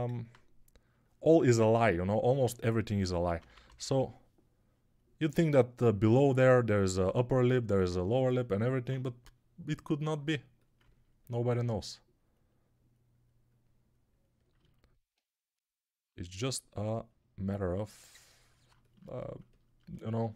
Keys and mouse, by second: 2.8-3.7 typing.